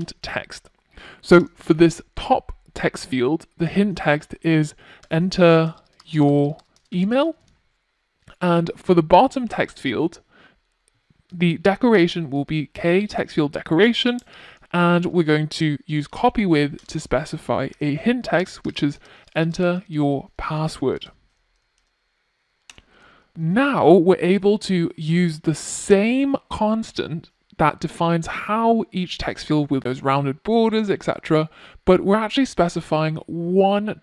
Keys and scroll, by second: 8.9 Return.